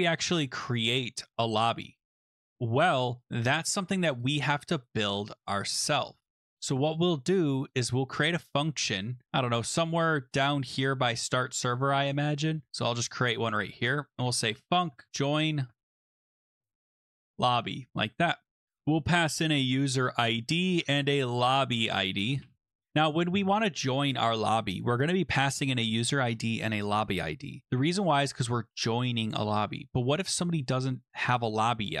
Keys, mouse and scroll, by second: 0.9-1.5 scroll down 7, 1.5-2.0 scroll up 2, 2.0-2.8 scroll, 4.2 click, 4.2 scroll down 7, 4.8 click, 5.6 click, 6.6-7.2 scroll, 7.7 click, 8.1 scroll down 6, 9.2 scroll up 3, 11.4 click, 12.2 BackSpace, 12.5 Return, 12.7 Return, 12.9 middle click, 12.9 BackSpace, 14.0-22.9 typing, 18.8 click.